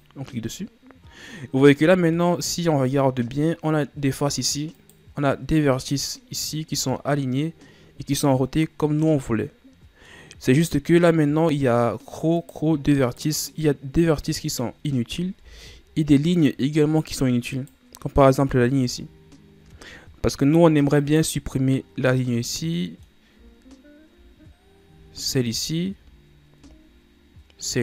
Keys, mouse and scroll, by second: 2.3-3.4 middle drag, 3.4-4.9 scroll up 1, 4.9 right click, 12.5 right click, 13.2 right click, 14.4-15.5 middle drag, 15.5 ctrl+Tab, 17.7 right click, 18.6 scroll up 1, 21.1 right click, 23.0-25.7 middle drag, 25.7 shift+right click.